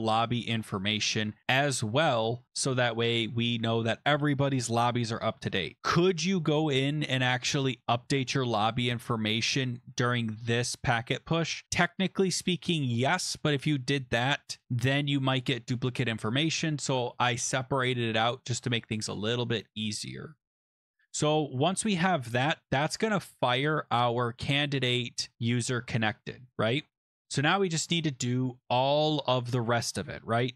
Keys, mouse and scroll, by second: 0.4 click, 9.5 click, 16.7 click, 18.1 click, 20.6 click, 21.7 ctrl+s, 23.5 click, 23.9 click, 24.6 scroll down 3, 25.6 scroll, 27.1 click.